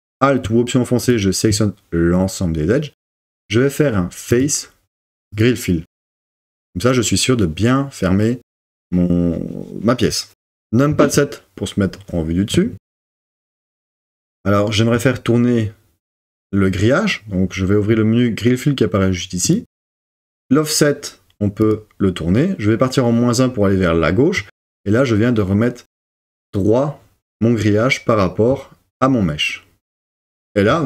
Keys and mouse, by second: 4.4-5.4 drag, 10.9 KP_7, 21.7 click.